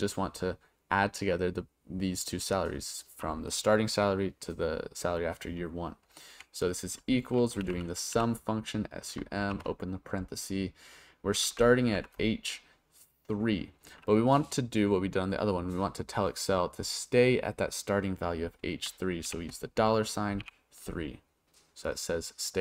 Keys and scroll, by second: 6.3 =, 7.4-9.4 typing, 11.9 shift+h, 19.2 shift+4, 20.4 3.